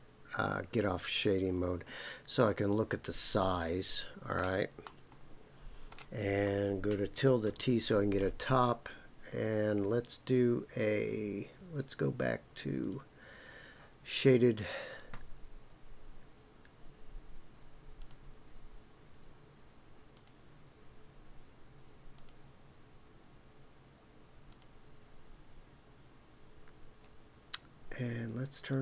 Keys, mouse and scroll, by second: 4.8-5.9 middle drag, 12.8 click, 18.0 click, 20.1 click, 22.1 click, 24.5 click, 26.0 scroll down 2.